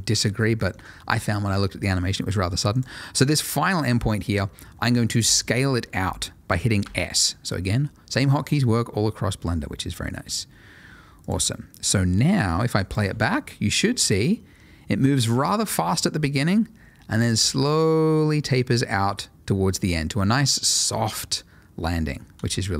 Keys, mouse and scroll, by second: 0.1 shift+middle click, 0.3 ctrl+middle click, 2.7 click, 6.8 s, 11.2 click, 13.1 space, 21.9 Escape, 22.3 space.